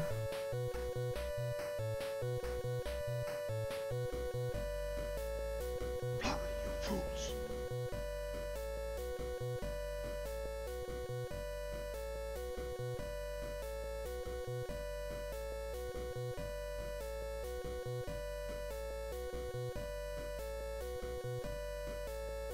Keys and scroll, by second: 1.6 s, 7.4 s, 12.7 s, 13.2 s, 19.7 s.